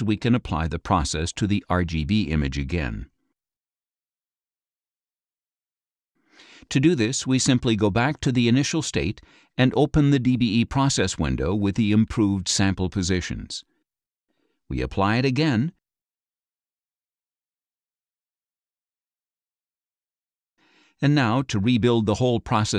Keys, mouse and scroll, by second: 0.0 click, 1.8-3.1 drag, 3.8 right click, 5.5 click, 8.4 click, 11.9 click, 14.8 click, 16.3 click, 17.4 click, 18.5 click, 19.8 click.